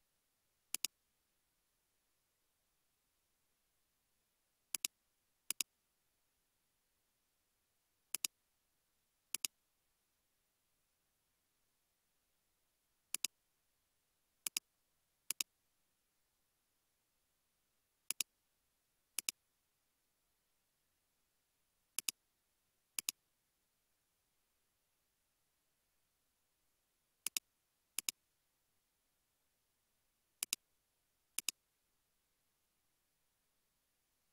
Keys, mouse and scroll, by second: 9.4 typing, 15.8-18.0 typing, 20.0-21.3 typing, 23.8-25.0 typing, 28.5-29.3 typing, 31.9-32.6 typing.